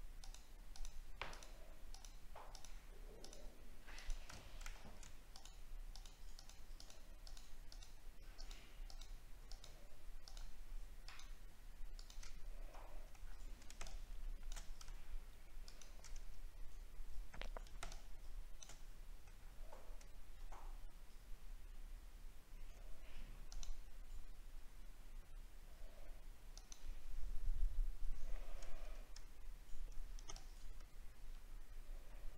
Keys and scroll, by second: 4.5 alt+scroll up 1, 13.1 alt+scroll down 1, 19.3 alt+scroll down 1.